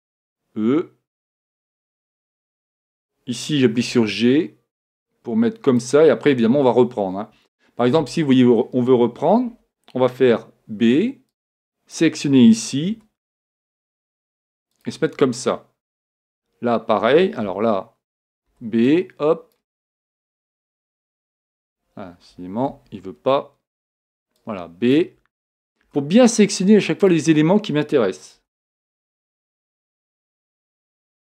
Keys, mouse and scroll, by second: 0.2 e, 1.7-3.5 drag, 3.8 g, 6.0-7.9 drag, 7.5-9.7 middle drag, 9.5 a, 10.3 b, 13.0 g, 14.9-16.8 drag, 16.3 b, 18.5 b, 20.5 g, 22.7 a, 24.0 b, 25.9 g, 27.2-28.9 drag, 28.4 a, 29.3 b, 31.0 g.